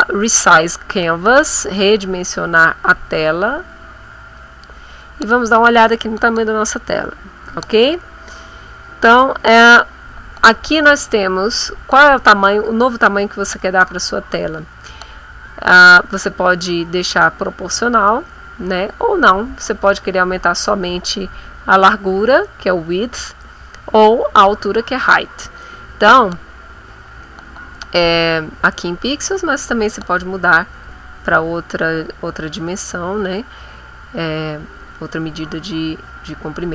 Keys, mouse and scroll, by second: 2.8 click, 4.4 click, 5.6 click, 16.5 click, 18.8 click, 29.2 click, 30.8 click.